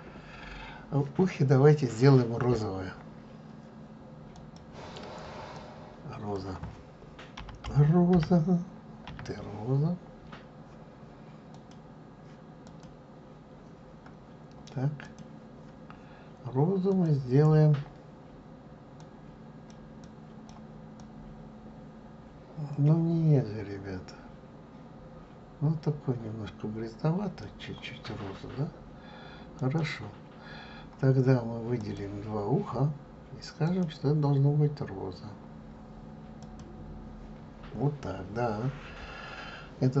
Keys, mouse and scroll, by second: 2.3-4.5 scroll down 1, 4.5-15.3 drag, 31.9 click, 35.9-40.0 drag.